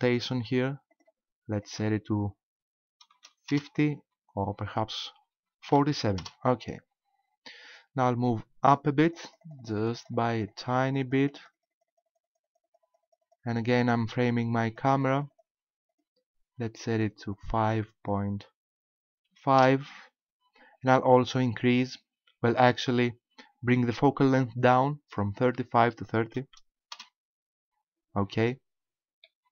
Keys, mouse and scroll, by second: 1.6 click, 4.7 click, 8.8 click, 9.1 click, 9.3 click, 9.5 click, 9.6 click, 9.8 click, 10.0 click, 10.2 click, 10.4 click, 10.5 click, 10.7 click, 10.9 click, 11.1 click, 11.2 click, 11.4 click, 11.6 click, 11.8 click, 12.0 click, 12.1 click, 12.3 click, 12.4 click, 12.6 click, 12.8 click, 13.0 click, 13.2 click, 13.5 click, 13.7 click, 14.6 click, 15.0 click, 15.2 click, 15.4 click, 15.9 click, 17.0 click, 21.6 click, 25.4 click, 29.3 middle click.